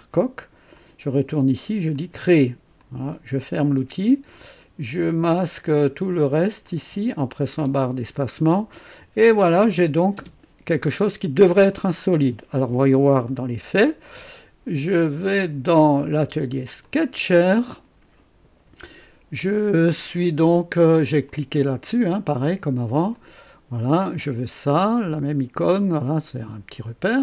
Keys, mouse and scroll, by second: 0.7 click, 1.9 click, 2.7 click, 4.2 click, 5.2 ctrl+click, 5.7 ctrl+click, 6.1 ctrl+click, 6.6 ctrl+click, 7.5 ctrl+space, 8.1-8.9 ctrl+drag, 9.3 click, 9.7 space, 10.1 space, 10.8-11.9 drag, 12.6 KP_3, 13.2 right click, 14.0 click, 15.3 click, 16.7 click, 17.5 right click, 21.2 click, 23.1 click, 24.1 click, 27.1 click.